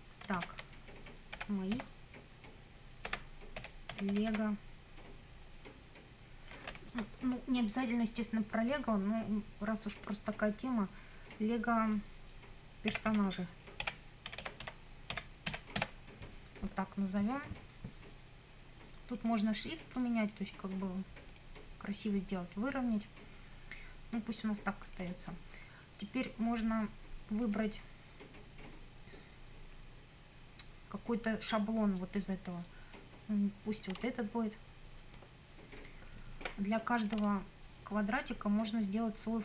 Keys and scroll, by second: 0.4 shift+v, 1.4 j, 1.7 b, 2.9-4.8 typing, 6.5 space, 6.7 -, 6.9 space, 12.7-16.3 typing.